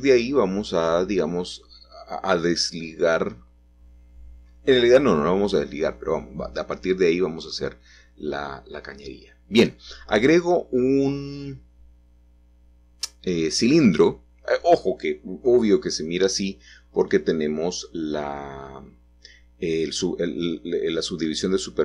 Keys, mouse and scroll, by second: 0.6-2.5 scroll down 3, 2.8-3.9 typing, 5.9 click, 7.2 g, 7.8 shift+z, 11.0 click, 12.1-13.7 scroll up 3, 14.5 z, 18.6 z, 20.8-21.8 drag.